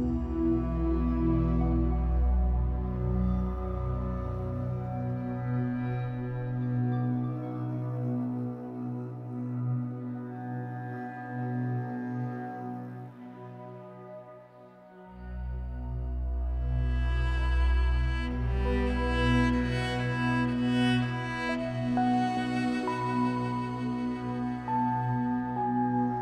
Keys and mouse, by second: 0.0 click, 1.2 click, 2.1 click, 3.3 alt+click, 5.9 click, 6.6 click, 7.8 click, 8.7 click, 9.5 click, 12.3 click, 13.9 click, 16.3 click, 17.4 click, 17.8 drag, 18.3 click, 18.8 drag, 19.9-22.3 drag, 22.3 Delete, 23.6-26.2 drag.